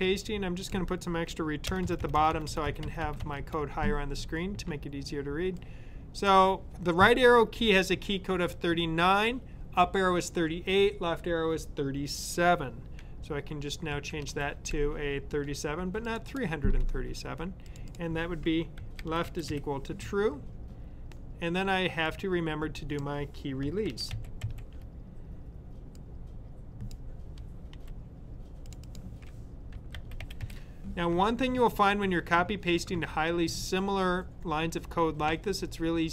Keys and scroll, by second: 13.6-14.3 typing, 16.2 typing, 18.4-19.9 typing, 23.7 super+c, 24.0 super+v, 29.4-30.8 typing.